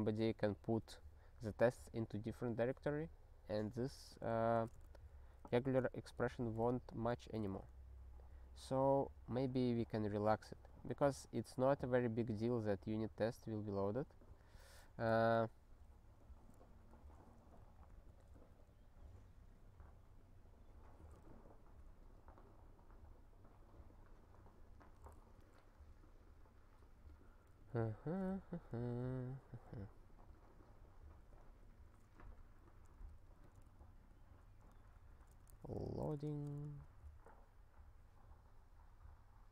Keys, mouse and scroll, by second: 4.5 ctrl+space, 4.8 alt+b, 5.0 alt+b, 5.5 alt+f, 6.1 ctrl+f, 7.1 ctrl+w, 7.4 ctrl+s, 9.9 ctrl+n, 12.7 alt+b, 14.2 alt+b, 14.4 alt+b, 14.8 alt+f, 15.0 alt+f, 16.5 alt+f, 16.9 alt+f, 17.5 alt+b, 18.0 ctrl+b, 18.4 Return, 21.2 alt+f, 25.3 alt+b, 27.5 alt+f, 27.7 alt+f, 32.5 alt+f, 33.1 ctrl+f, 33.6 alt+b, 34.1 alt+b, 34.7 ctrl+b, 34.9 ctrl+b, 35.0-36.7 typing, 36.9 ctrl+s.